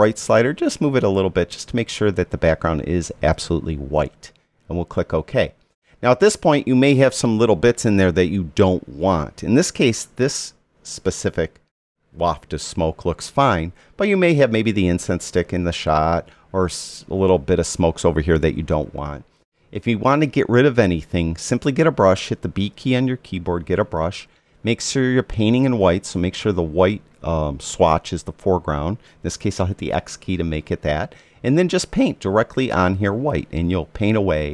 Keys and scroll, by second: 22.8 b, 30.0 x.